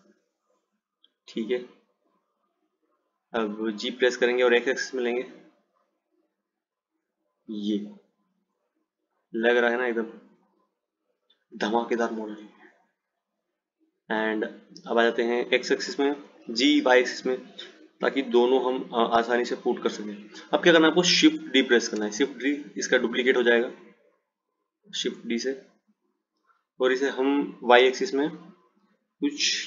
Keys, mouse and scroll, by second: 4.0 g, 9.4 click, 12.3 click, 14.2 click, 16.5 g, 22.0 shift+d.